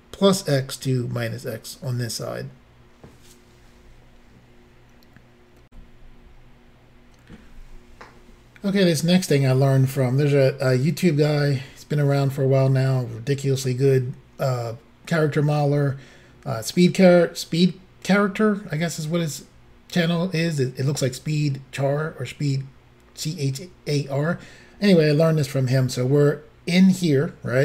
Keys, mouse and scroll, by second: 5.7 Insert.